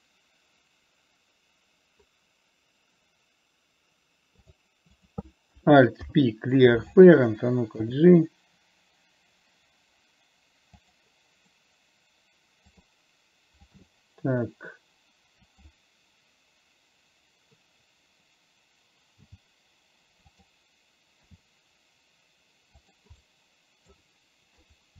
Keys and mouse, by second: 6.4 alt+p, 8.2 g, 13.1 click, 14.1 g, 19.5 g, 21.6 e, 23.6 middle click.